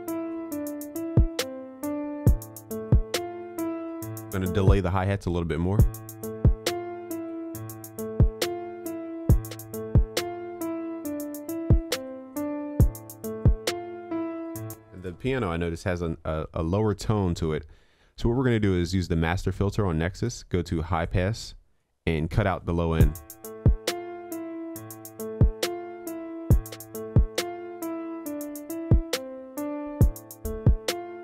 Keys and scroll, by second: 7.7 ctrl+s.